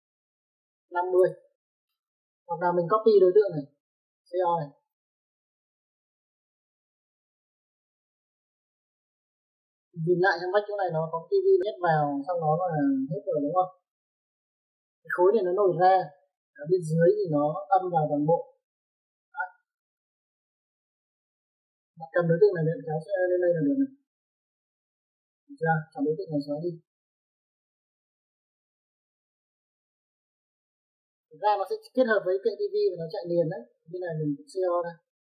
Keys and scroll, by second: 1.1 KP_5, 1.3 KP_0, 1.8 Return, 4.7-5.4 typing, 9.7 space, 25.2 Escape, 30.0 e, 30.1 space, 35.2-35.3 typing.